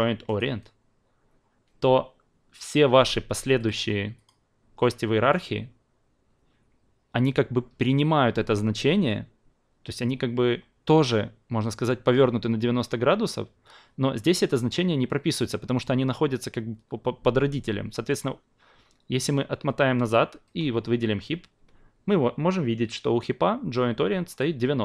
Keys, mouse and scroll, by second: 0.3-24.4 drag.